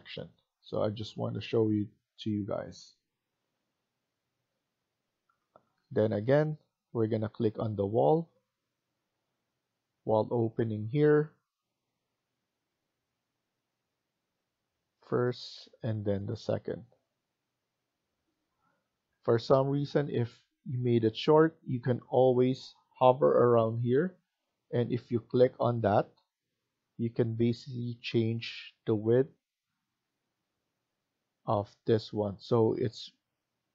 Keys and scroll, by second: 18.6 Escape, 18.9 Escape.